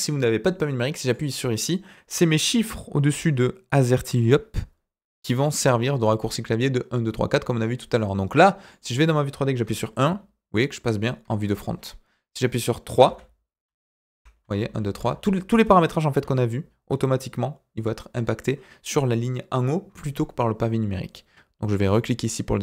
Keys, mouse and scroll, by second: 8.6 middle click, 9.6 KP_1, 11.6 KP_3, 13.0-14.9 typing, 16.2 KP_7.